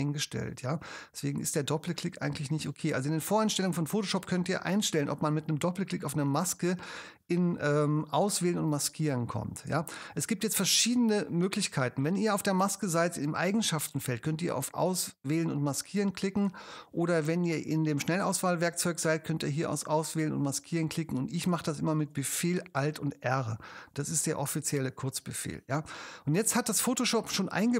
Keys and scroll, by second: 23.3 alt+super+r.